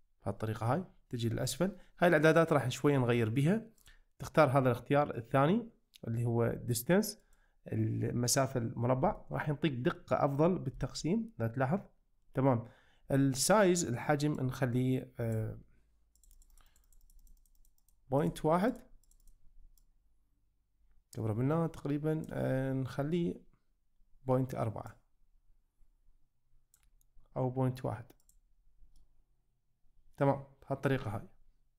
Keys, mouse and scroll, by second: 3.8-7.4 drag, 9.2 shift+middle click, 10.0-10.3 middle drag, 10.8 shift+middle click, 14.5-15.5 drag, 16.2 click, 16.4 click, 16.7 click, 17.7 click, 18.2 click, 18.8 click, 19.1 click, 19.3 click, 19.8-22.3 drag, 25.0-26.9 drag, 28.3 click, 29.0-30.8 middle drag.